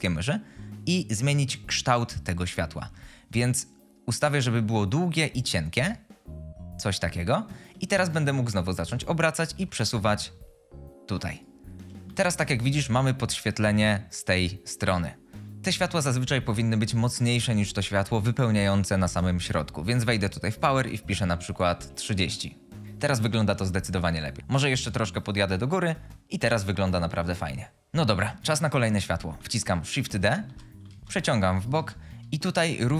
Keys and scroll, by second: 8.3-9.5 typing, 22.1 typing, 22.7 Return, 23.5 typing, 27.2 g, 29.9-31.7 typing.